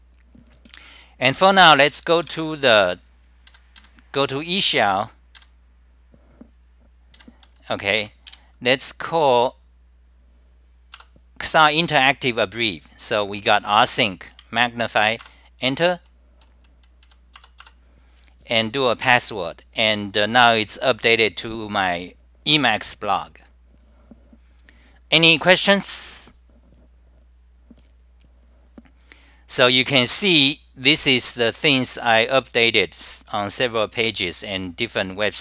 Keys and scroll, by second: 0.0-0.3 typing, 8.4 j, 17.6 Return, 30.5-34.3 typing.